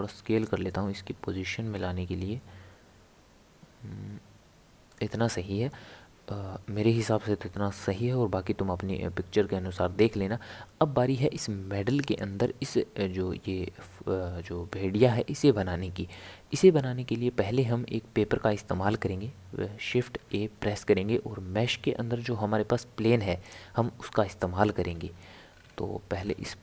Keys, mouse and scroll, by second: 20.2 shift+a, 24.7 scroll down 1, 24.8 scroll up 1, 24.9-25.5 scroll down 4, 25.5 scroll up 1, 25.6 scroll down 1, 26.1 scroll down 1, 26.1 scroll up 1.